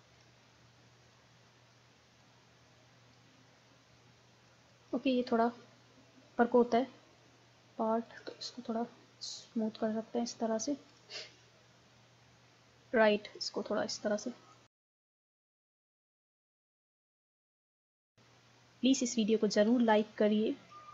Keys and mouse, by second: 4.4-5.5 middle drag, 5.5-10.0 drag, 10.5 click, 11.2-12.2 middle drag, 13.4-19.1 drag, 19.2 middle click.